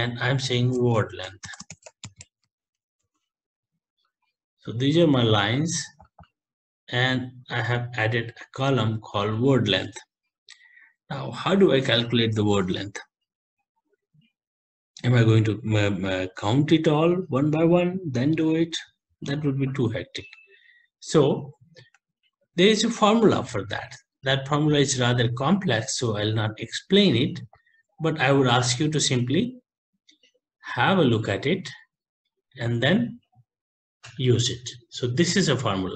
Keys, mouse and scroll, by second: 0.0-3.5 typing, 6.4 click, 6.4 typing, 6.5 click, 9.0 click, 22.0 ctrl+Left, 22.7 ctrl+s, 25.5 click, 27.9 click, 29.4 click, 30.9 click, 33.1 shift+Up, 34.2 End.